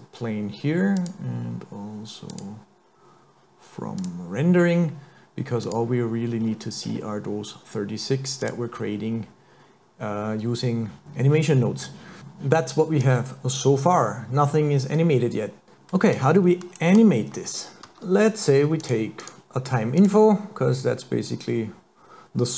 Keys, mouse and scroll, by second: 1.0 click, 4.1 click, 5.7 click, 6.4-6.8 scroll down 4, 6.8-7.1 scroll up 4, 8.4 click, 13.0 click, 14.5 middle click, 17.8 click, 17.8 shift+a, 17.9 shift+a.